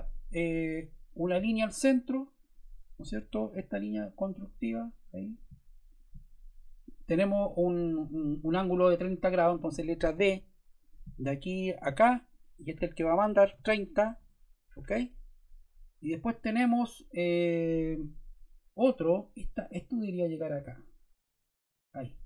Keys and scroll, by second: 3.1 Escape, 10.1 d, 13.1-14.0 typing, 14.1 Return, 16.6 Escape.